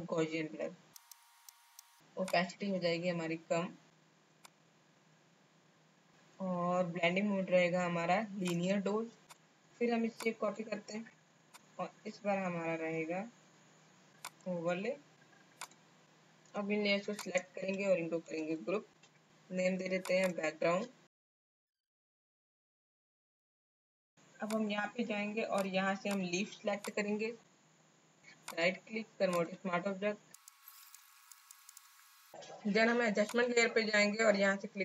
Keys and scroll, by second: 18.3 ctrl+shift+g, 21.1-24.0 typing.